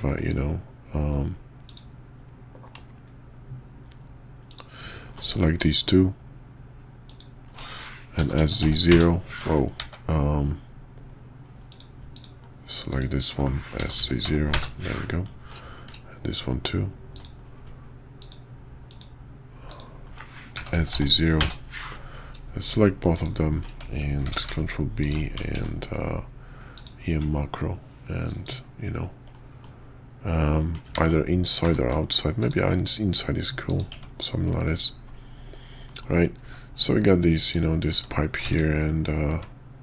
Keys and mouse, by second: 1.6 alt+click, 4.5 alt+click, 7.0 alt+shift+click, 8.1 s, 9.8 ctrl+z, 11.7 click, 12.1 alt+click, 12.9 alt+click, 13.7 s, 18.2 alt+click, 18.8 alt+click, 19.6 alt+click, 20.5 s, 23.1 alt+shift+click, 24.3 ctrl+b, 25.5 q, 29.3 middle click, 29.5 click, 30.9 ctrl+z, 31.6 q, 33.9 Tab, 35.9 middle click, 37.4 click, 39.3 `.